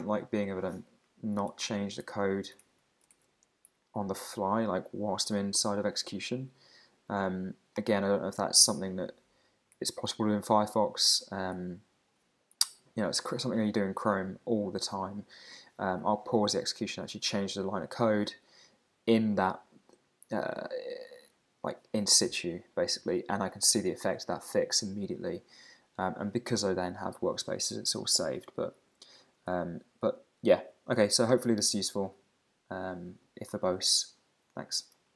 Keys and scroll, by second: 1.2 super+Right, 1.5 shift+super+Left, 2.0 Left, 2.6 alt+Right, 3.1 alt+shift+Right, 3.7 Right, 9.2 Down, 9.8 super+Right, 10.1 Up, 11.1 super+Right, 11.6 Up, 29.0 super+`, 30.6 super+`.